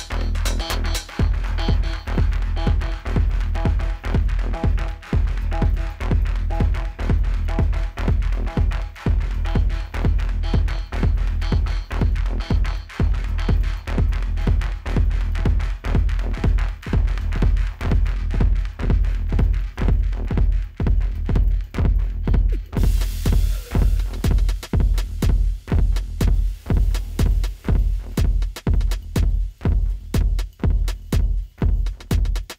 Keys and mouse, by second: 5.5-5.9 typing, 10.2 click, 20.2 click, 23.6 z, 24.2 click, 25.1 d, 25.8 click, 28.6 ctrl+z.